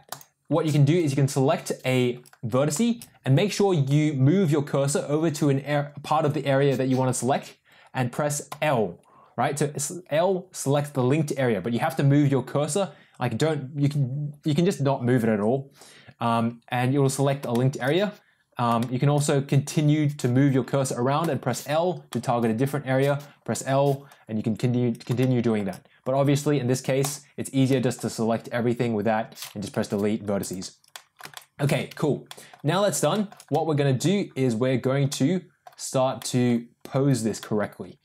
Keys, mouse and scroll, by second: 0.0 click, 8.4 l, 17.5 shift+middle click, 18.7 shift+middle click, 21.1 l, 22.0 middle click, 23.4 l, 25.1 middle click, 26.9 click, 27.6 middle click, 29.6 Delete, 30.8 middle click, 31.2 shift+middle click, 31.9 Tab, 32.2 middle click, 33.0 shift+middle drag, 33.4-33.9 middle drag, 35.0 middle click, 36.1 middle click, 37.0 click, 37.3-38.0 middle drag.